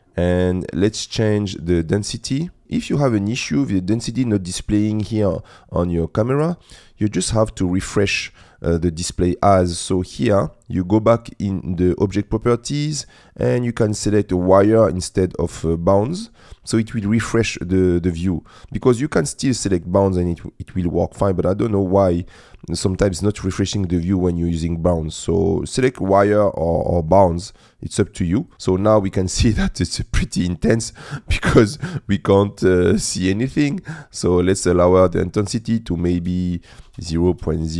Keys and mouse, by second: 13.0-14.5 drag, 19.0 click, 25.3-26.5 drag, 27.5-28.5 drag, 34.2-37.7 drag.